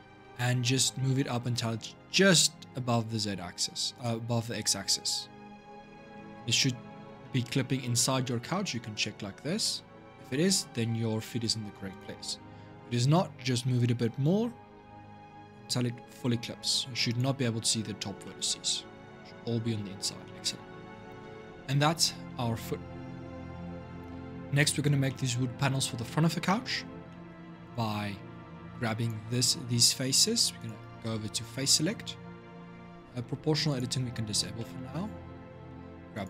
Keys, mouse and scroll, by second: 6.1 scroll up 2, 6.3 middle click, 7.2 scroll down 1, 7.4 scroll up 1, 7.6-11.7 middle drag, 11.7 click, 12.5-13.9 scroll up 1, 13.9 g, 18.0-19.6 middle drag, 19.6-20.0 scroll down 4, 20.0 middle click, 20.6-21.6 scroll down 4, 22.0 Tab, 22.5 scroll down 2, 23.6-26.6 middle drag, 26.6 scroll up 2, 26.9-27.4 middle drag, 27.4 click, 28.0 Tab, 28.8 click, 30.3-33.5 drag, 34.3-35.9 middle drag, 35.9 click.